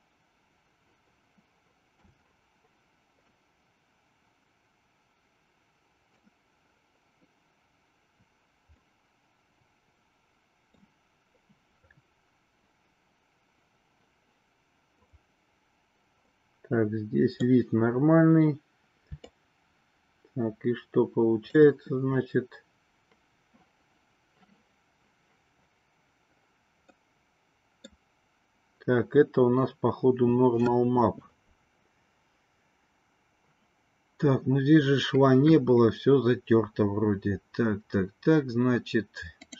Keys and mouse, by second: 3.7-6.3 middle drag, 8.9-11.3 middle drag, 15.3 click, 16.4-17.7 middle drag, 19.3-21.8 shift+drag, 27.2 middle click.